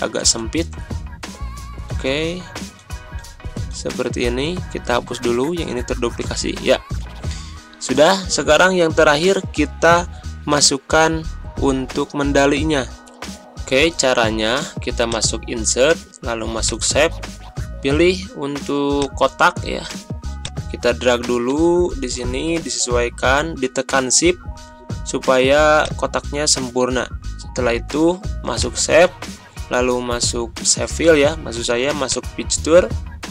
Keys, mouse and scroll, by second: 6.2 Delete, 15.0 click, 20.6 click, 32.1 click.